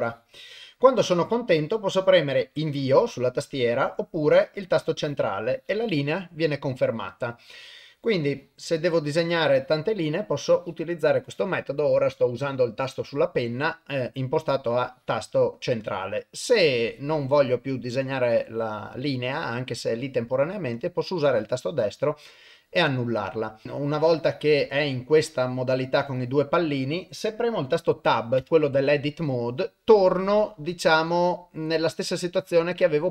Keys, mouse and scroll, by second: 8.4 click, 9.6 click, 10.5 click, 14.9-20.6 drag, 21.3 click, 23.6-33.1 drag.